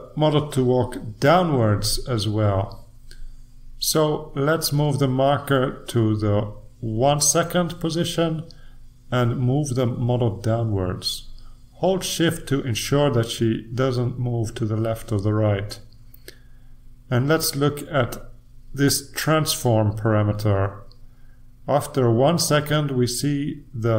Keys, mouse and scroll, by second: 6.5 click, 10.0-12.0 shift+drag, 18.4 click, 20.4 click, 21.5 click, 23.1-23.9 drag.